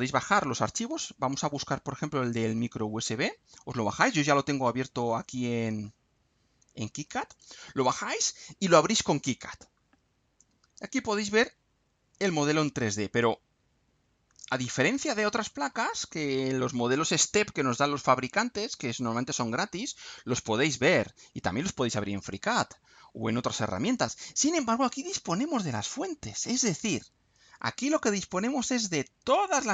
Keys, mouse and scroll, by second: 0.7-1.1 scroll down 2, 1.8-2.3 scroll down 2, 7.3 click, 9.1-9.5 scroll up 2, 9.8 scroll down 2, 10.4 click, 11.3-13.9 middle drag, 14.0 middle click, 14.6-16.3 middle drag, 22.7-25.5 middle drag, 27.6 click.